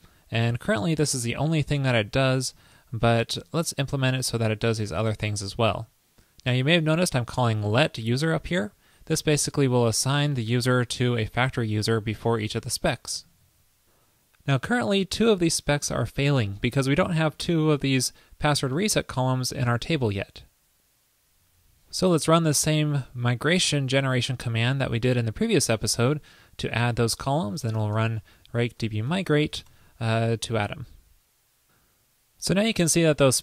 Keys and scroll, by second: 13.5 super+s, 21.4 super+v.